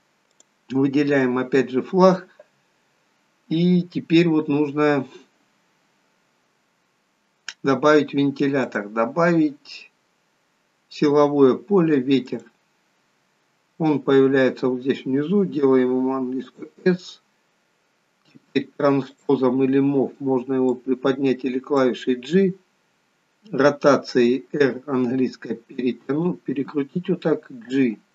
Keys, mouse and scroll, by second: 0.3 click, 8.6 click, 13.4-14.1 scroll down 3, 14.1-15.5 scroll down 5, 15.6 s, 19.0 click, 20.6 click, 22.1-23.6 scroll up 2, 23.6-24.1 scroll up 4, 24.5 r, 27.8 g.